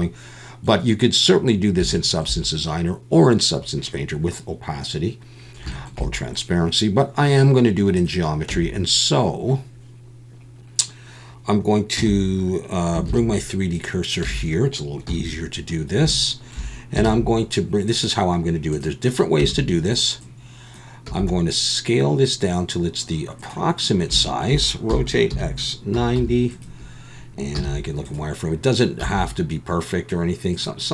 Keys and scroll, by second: 8.5 Tab, 12.0 a, 13.1 shift+s, 14.2 Tab, 15.1 KP_1, 17.0 shift+a, 19.4 Tab, 21.0 s, 24.9 r, 25.3 x, 25.9 9, 26.1 0, 27.5 z, 29.0 s.